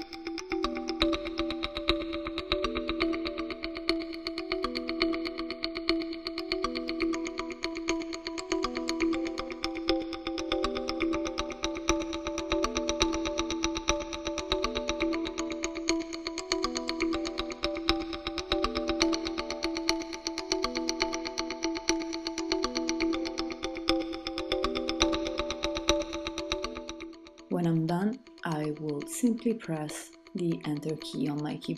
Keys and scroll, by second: 27.1 Return.